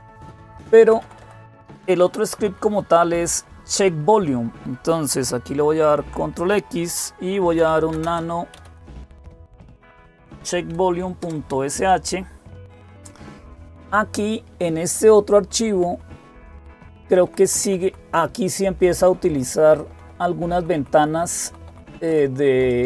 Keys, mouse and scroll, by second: 0.6 Down, 0.8 Down, 1.6 Down, 5.5 ctrl+x, 7.1-9.1 typing, 9.7 Tab, 11.0 Return, 16.8 Down, 17.0 Down, 17.2 Down, 17.4 Down, 17.6 Down, 18.0 Up, 18.6 Right, 18.8 Right, 19.0 Right, 19.1 Right, 19.3 Right, 19.7 Right, 19.9 Right, 20.6 Right, 20.8 Right, 21.0 Right, 21.5 Right, 21.7 Right, 22.4 Right, 22.7 Right.